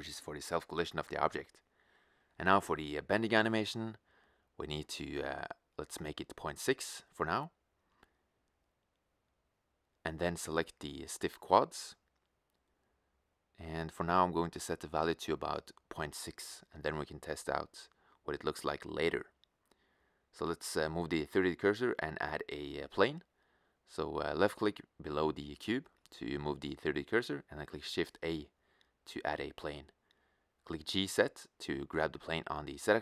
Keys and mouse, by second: 13.1-16.2 drag, 23.0-24.7 middle drag, 26.6 shift+a, 31.1 g, 31.9-32.9 middle drag, 32.9 s.